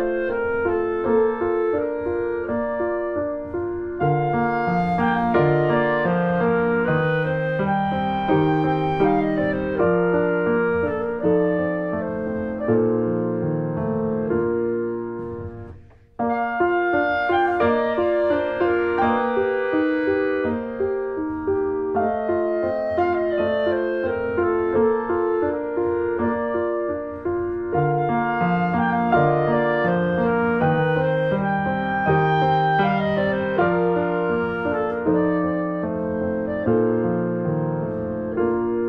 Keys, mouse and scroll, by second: 0.0 scroll down 1, 0.2 middle click, 0.9 s, 2.3 middle click, 3.3 scroll down 2, 3.5 middle click, 4.6-8.0 drag, 8.2-9.3 middle drag, 9.3 r, 12.4-13.4 middle drag, 13.4 r, 15.6 alt+middle click, 16.3-16.6 scroll up 1, 16.6 shift+middle click, 17.1 r, 21.5 click, 21.7 middle click, 22.1 click, 22.2 middle click, 23.1 click, 23.4-24.8 middle drag, 24.8 click, 26.0 middle click, 26.2-26.5 scroll down 2, 26.5 click, 26.7-28.9 middle drag, 28.9-29.3 scroll up 1, 29.6 click, 29.8 middle click, 30.8 click, 31.9 click, 32.4 middle click, 32.7 click, 33.3 alt+middle click, 33.8 click, 34.3 shift+middle click, 34.4 shift+scroll up 1, 34.9 click, 35.7 click, 36.5 alt+middle click, 36.9 scroll up 4, 37.1 shift+middle click, 37.6 click, 38.5 ctrl+z.